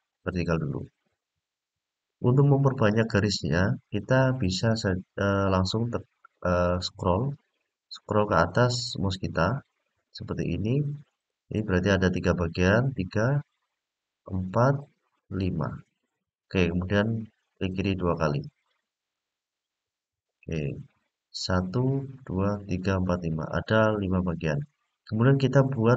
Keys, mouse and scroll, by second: 18.9 click, 20.2 click.